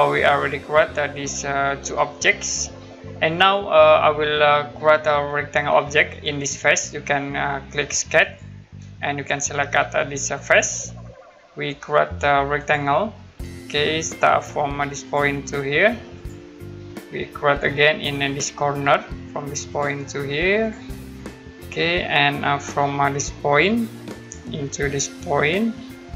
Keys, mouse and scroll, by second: 0.6 middle click, 3.6-4.0 scroll down 1, 8.2 click, 10.4 click, 12.6 click, 13.1 middle click, 13.7-15.0 scroll down 1, 15.0 click, 16.6 scroll down 1, 18.5-18.8 scroll down 1, 19.7 click, 20.9 scroll down 1, 21.4 scroll up 1, 21.9 middle click, 22.6-24.0 scroll down 1, 24.2 click.